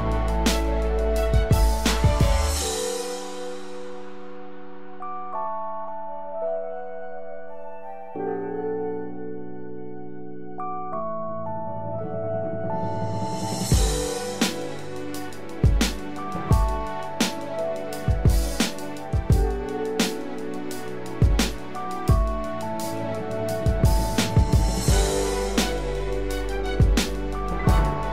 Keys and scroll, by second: 4.4 ctrl+=, 4.9 ctrl+=, 15.6 ctrl+=.